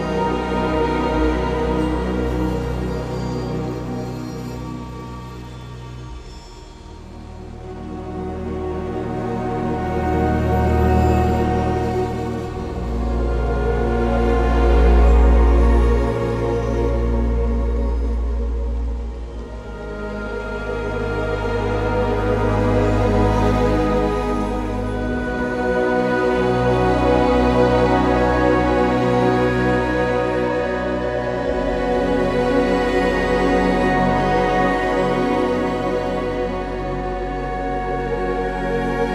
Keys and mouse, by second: 3.3 shift+click, 8.5 ctrl+b, 10.7 1, 12.1 KP_3, 12.9 shift+middle click, 14.3 g, 18.1 g, 18.7 click, 21.4 g, 24.6 2, 27.5 alt+shift+click, 33.3 alt+shift+click, 36.0 e, 36.3 x, 38.5 click.